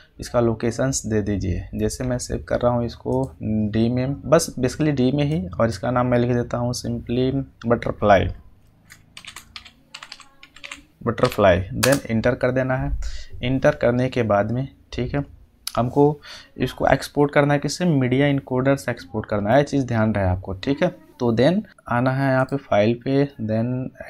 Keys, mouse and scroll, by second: 2.0-2.6 scroll down 1, 3.0 click, 4.2-5.2 scroll up 1, 5.2-5.9 drag, 8.8 click, 8.9-11.4 typing, 11.7 Return, 20.1-21.2 scroll down 1, 22.3 click.